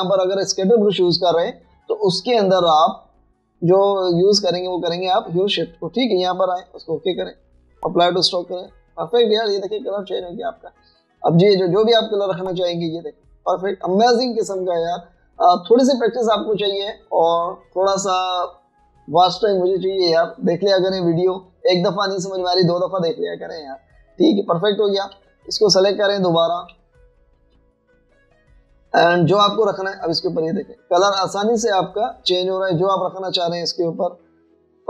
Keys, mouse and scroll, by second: 1.0 double click, 12.8 double click, 14.3 double click, 18.3 double click, 25.3 double click, 26.2 v, 27.8 v, 28.3 shift+click, 30.8 double click, 33.2 double click.